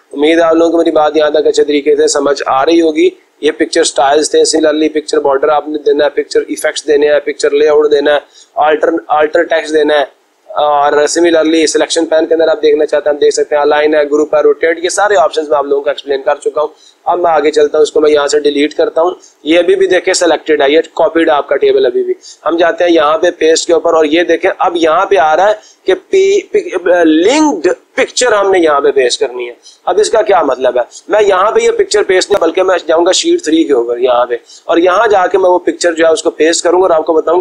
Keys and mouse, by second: 0.4 click, 17.2 click, 18.0 Delete, 23.4 click, 33.3 click, 34.0 click, 35.3 click, 36.0 click, 36.2 click.